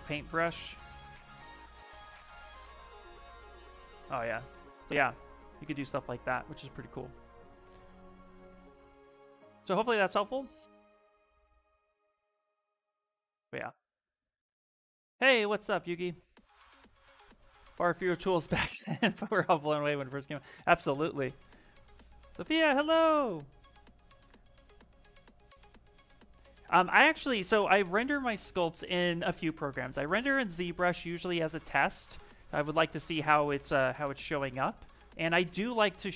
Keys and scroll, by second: 0.4 p, 1.1 a, 6.1 ctrl+z, 6.3 ctrl+z, 7.4 ctrl+z, 8.1 ctrl+z, 10.0 ctrl+z, 10.4 ctrl+z, 12.9 s, 33.7 v.